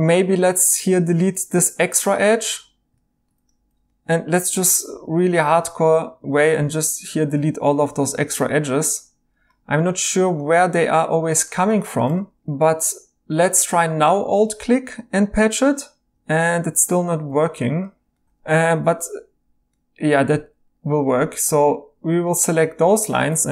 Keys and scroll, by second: 1.0 x, 4.9 x, 6.6 x, 17.2 Escape, 18.3 typing.